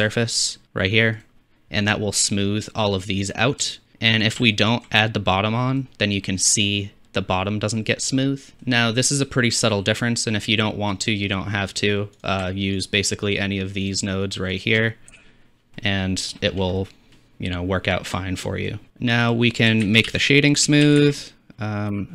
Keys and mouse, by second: 1.1 click, 1.1 right click, 1.9-2.3 drag, 2.1-3.6 middle drag, 2.1 right click, 3.6-4.9 shift+drag, 5.4-7.4 drag, 7.4 middle drag, 7.5 drag, 10.7-12.2 middle drag, 12.2-15.2 shift+drag, 15.2 m, 16.0-17.8 drag, 17.8 middle drag, 18.0 click, 18.2 middle click, 18.9-20.0 drag, 20.0 shift+a.